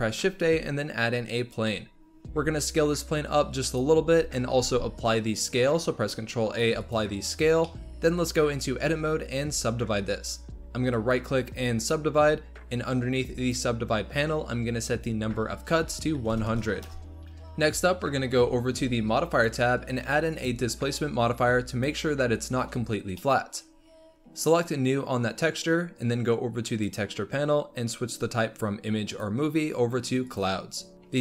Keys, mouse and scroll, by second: 1.4 shift+a, 2.3 s, 4.5 ctrl+a, 7.6-8.8 middle drag, 8.8 Tab, 10.9-13.3 right drag, 13.3-15.1 drag, 17.2 shift+middle click, 17.8 Tab, 19.2 click, 20.2 click, 21.8-22.9 drag, 22.9 scroll down 1, 23.1-24.4 middle drag, 24.4-26.9 drag, 29.0-30.9 drag.